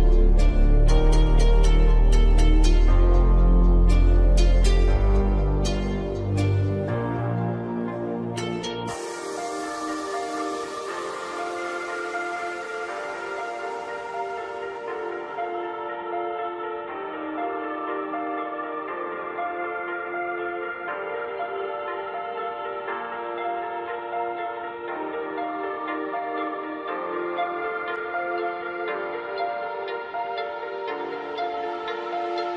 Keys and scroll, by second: 0.8 ctrl+g, 16.1 ctrl+j.